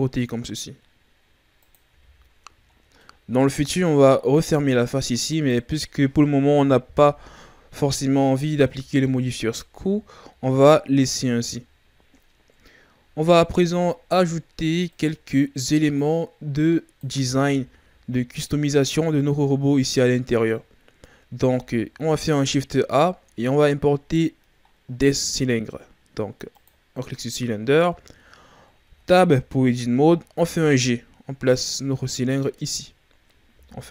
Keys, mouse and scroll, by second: 1.9 a, 2.2-2.7 scroll down 3, 2.9-3.7 middle drag, 3.7-4.1 scroll up 3, 4.1-5.2 middle drag, 5.2 right click, 6.8 KP_1, 8.0-8.5 scroll down 3, 8.5 a, 9.1-9.8 scroll down 5, 9.8-11.5 ctrl+scroll down 5, 11.5-12.9 scroll down 1, 12.9-13.5 scroll up 1, 13.5-14.9 ctrl+scroll up 8, 14.9-15.9 right drag, 15.9 click, 17.4 a, 17.7-18.7 scroll down 10, 21.3 shift+a, 28.0-28.8 scroll up 2, 28.8 Tab, 30.3 g, 32.0-33.5 scroll up 11, 33.5 s.